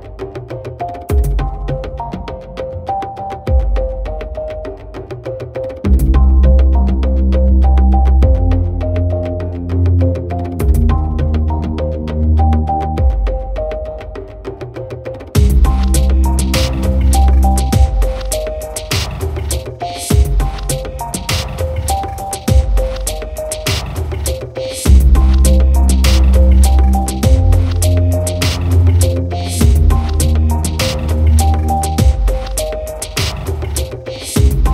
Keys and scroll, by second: 10.2 ctrl+t.